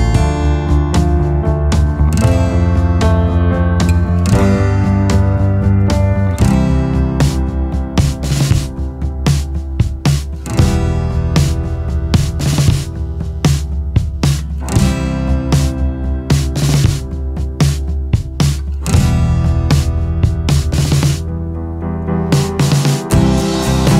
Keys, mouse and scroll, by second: 15.9 scroll.